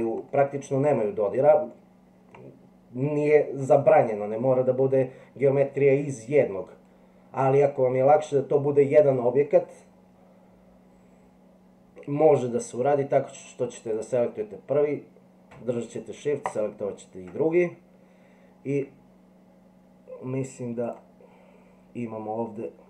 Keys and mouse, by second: 0.3-0.8 middle drag, 1.7-2.3 middle drag, 13.9 click, 16.5 shift+click, 20.8-22.8 drag.